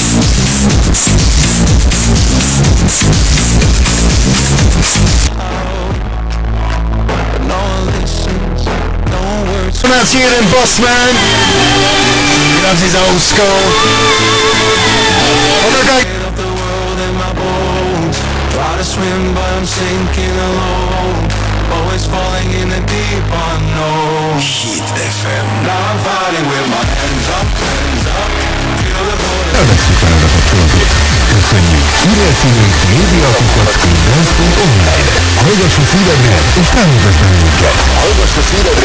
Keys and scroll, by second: 5.7 Page_Down, 16.1 Page_Down.